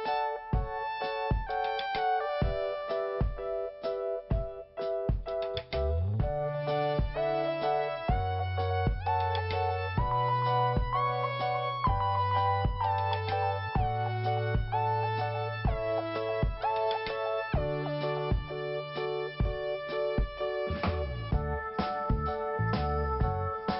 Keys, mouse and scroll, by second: 3.0 click, 5.2 click, 10.7 click, 10.8 click, 11.4 click, 11.5 click, 13.3 click, 13.3 click, 13.9 scroll up 1, 14.8 click, 14.9 click, 15.5 click, 16.1 click, 16.7 click, 17.4 click, 18.3 click, 20.8 click, 23.3 click.